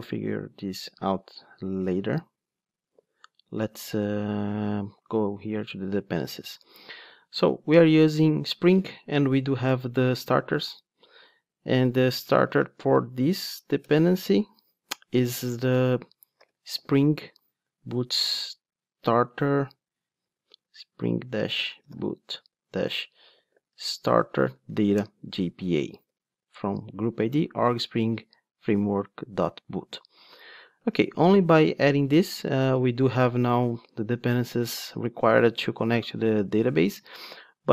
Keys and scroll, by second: 13.8 Return, 25.1 Return.